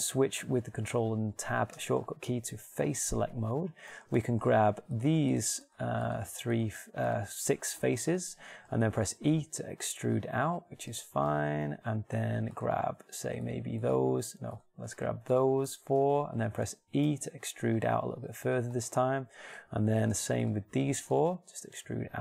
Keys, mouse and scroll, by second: 2.1 ctrl+Tab, 9.6 e, 15.4-17.9 shift+right drag, 17.6 e, 18.9-22.2 middle drag.